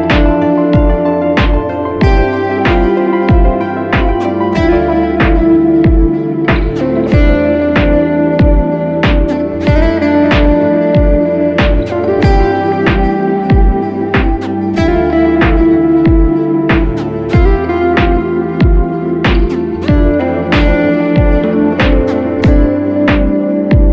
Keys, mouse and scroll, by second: 23.8 alt+shift+click.